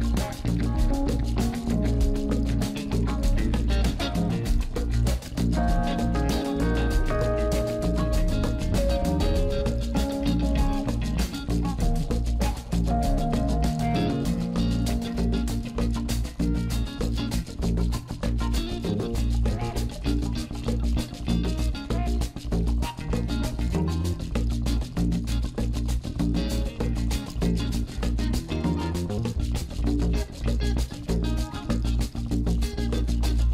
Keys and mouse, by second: 2.0-3.0 drag, 4.0 click, 14.3 click, 20.0 click, 26.2 click, 27.8 click, 31.6 click.